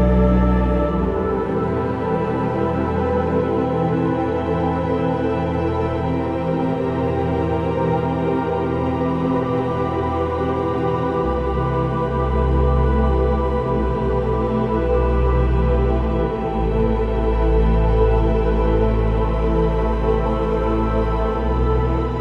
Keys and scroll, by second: 1.0 v, 1.4 ctrl+t, 3.1 ctrl+alt+t, 6.0 ctrl+j.